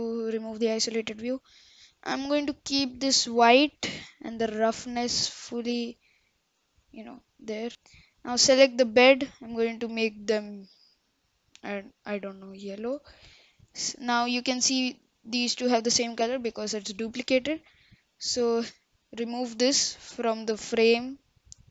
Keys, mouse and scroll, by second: 0.4-0.7 scroll up 1, 0.7-4.9 middle drag, 4.9 click, 5.5-5.8 middle drag, 5.8-6.3 scroll up 3, 6.3-6.7 middle drag, 6.7-7.3 scroll up 1, 7.7-8.6 middle drag, 8.6 click, 10.7 click, 13.9 click, 15.0 click, 15.6 click, 16.2 click, 18.7-19.7 drag, 20.7 click.